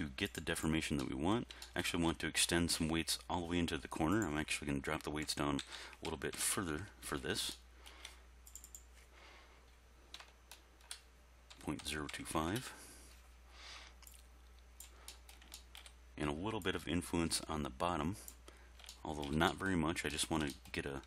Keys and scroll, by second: 5.3 ., 5.6 0, 6.1 2, 6.4 5, 6.5 Return, 10.2 BackSpace, 11.5 ., 11.8 0, 12.1 2, 12.4 5, 12.5 Return.